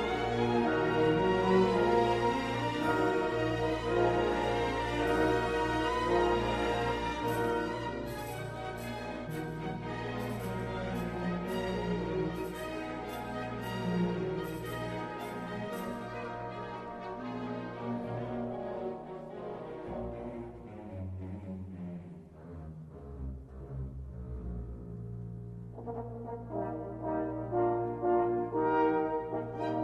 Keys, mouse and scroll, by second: 0.6-2.8 drag, 3.8-10.9 middle drag, 12.0 shift+click, 13.2 shift+click, 13.8-16.7 middle drag, 18.0 q, 23.5-26.5 drag, 29.4 Tab.